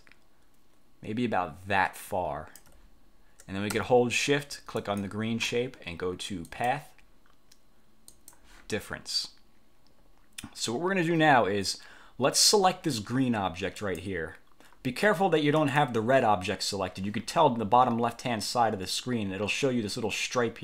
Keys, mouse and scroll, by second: 4.9 shift+click, 6.6 click, 8.2 click, 13.9 click, 15.7 click.